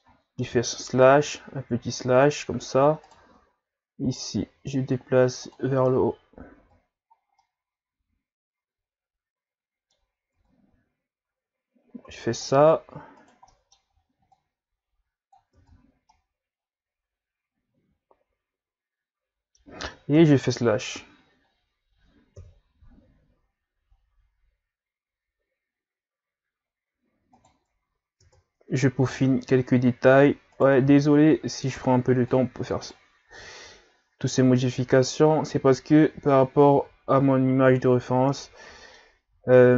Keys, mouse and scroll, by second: 0.5 KP_Divide, 1.5-2.8 scroll down 3, 3.1-4.1 shift+right drag, 4.1-6.7 drag, 6.7 Tab, 7.1-7.4 scroll down 1, 7.4-10.2 middle drag, 10.2 scroll up 1, 10.3 Tab, 12.3 click, 13.2 right click, 13.5 middle click, 14.3-15.5 drag, 15.5 Tab, 16.1-19.3 middle drag, 20.1 KP_Divide, 21.2-21.5 scroll down 4, 22.4 KP_3, 23.3-24.1 scroll up 6, 27.3 right click, 28.2 Tab, 29.0 z, 29.4-29.8 ctrl+scroll down 2, 29.8-30.5 scroll up 1, 30.5 right click, 30.8 c, 33.4-36.7 drag, 36.7 Tab, 37.7 z, 37.9-38.3 scroll down 5, 38.3 middle click, 39.2 a, 39.6-39.7 middle drag.